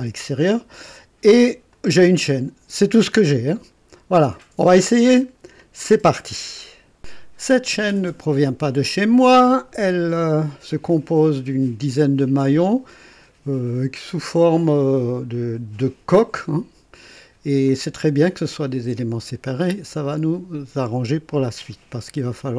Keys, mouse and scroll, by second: 1.7 click.